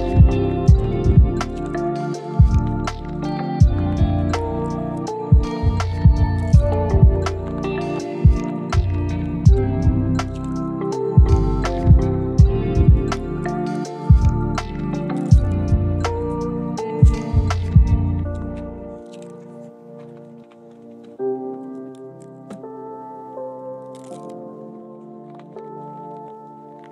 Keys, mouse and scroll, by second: 0.6 double click, 2.3 middle click, 2.7 ctrl+z, 4.4 middle click, 6.8 double click, 8.7 double click, 14.0 double click, 16.4 middle click, 18.5 double click, 20.2 middle click, 22.3 middle click, 22.7 shift+middle click, 23.0 right click, 26.2 double click.